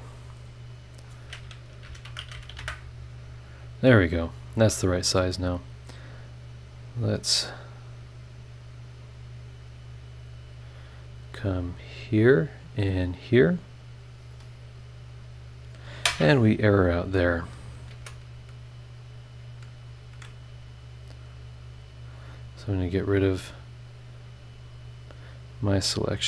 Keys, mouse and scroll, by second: 0.1 click, 0.7 click, 1.8 KP_3, 2.1 KP_1, 2.3 KP_2, 2.5 KP_5, 2.6 KP_Enter, 3.9 scroll down 2, 4.2 scroll up 2, 5.9 right click, 6.8 right click, 7.2 right click, 8.1 click, 9.0 click, 11.2 click, 11.8 scroll down 1, 12.8 click, 14.3 click, 17.9 ctrl+z, 20.1 ctrl+click, 20.4 ctrl+click, 21.2 scroll down 2, 22.5 click, 23.1 click, 23.9 click, 24.4 click, 25.5-26.0 scroll down 4, 26.0 scroll up 2.